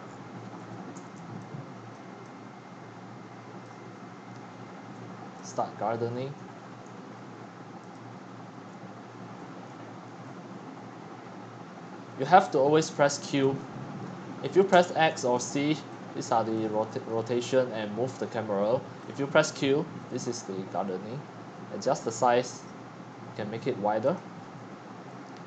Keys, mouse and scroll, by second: 0.0-3.7 typing, 0.0 click, 1.4 click, 2.3-2.8 drag, 3.6 click, 5.7 click, 6.6 q, 7.8 click, 8.7-10.7 typing, 11.9-15.4 typing, 16.2 click, 17.1-17.6 drag, 17.1-18.9 typing, 19.0 click, 20.2-21.8 scroll up 3, 22.0-22.6 drag.